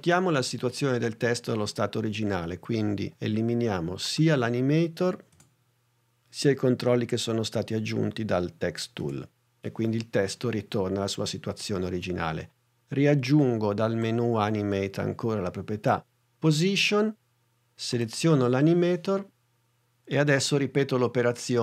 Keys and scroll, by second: 5.4 BackSpace, 9.0 BackSpace.